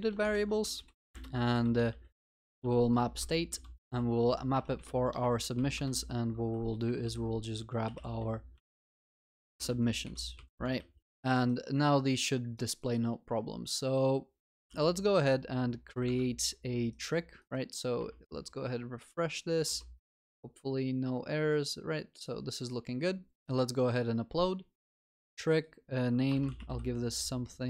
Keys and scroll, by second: 0.7 ctrl+BackSpace, 1.0 Return, 10.9 ctrl+s, 14.7 ctrl+s.